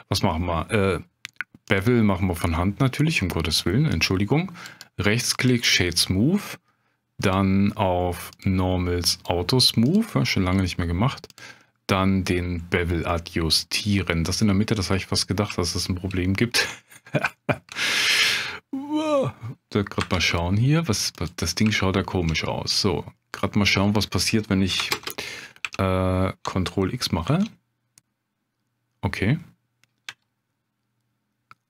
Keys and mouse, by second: 1.7-4.0 drag, 7.2 click, 8.3 click, 9.1 click, 9.9 click, 13.1-13.6 middle drag, 15.6-16.0 shift+drag, 16.5 Tab, 17.4 shift+click, 18.3 middle click, 20.0 2, 20.2 click, 21.6 middle click, 21.7 shift+click, 22.5-23.8 middle drag, 25.0 ctrl+space, 27.3 ctrl+x, 30.0 g.